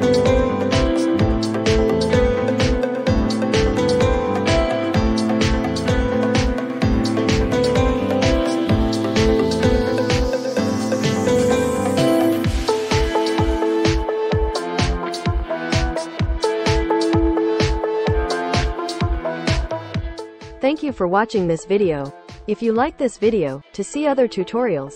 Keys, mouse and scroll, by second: 16.2-19.4 drag.